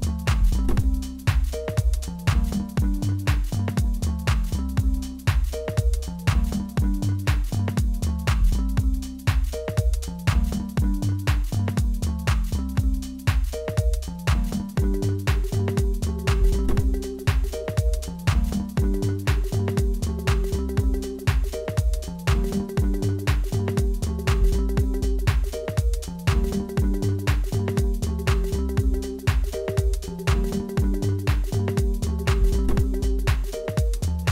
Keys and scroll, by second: 1.3 g, 10.3 g, 16.0 g, 18.4 a, 22.1 g, 25.2 s, 30.7 shift+z, 32.3 2.